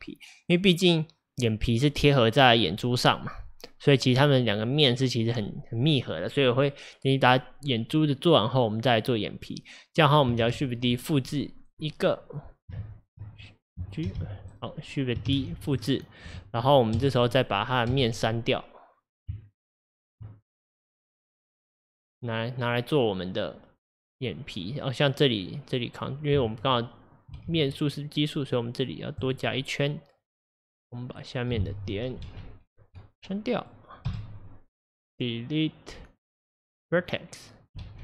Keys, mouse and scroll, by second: 4.0-7.0 middle drag, 10.5 shift+d, 11.7-12.9 right drag, 12.9 ctrl+z, 14.1 g, 15.3 shift+d, 17.0 KP_Divide, 18.0 KP_1, 19.4 Tab, 20.6 click, 22.5 scroll down 2, 24.1 scroll up 2, 27.5 ctrl+r, 30.3 click, 32.3 alt+z, 32.9 click, 34.1 x, 37.9 alt+z.